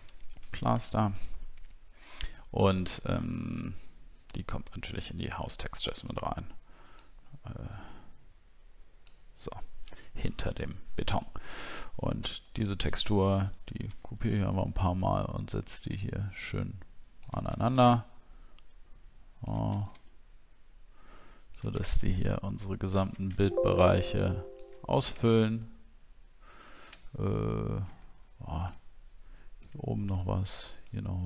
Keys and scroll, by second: 23.3 alt+x.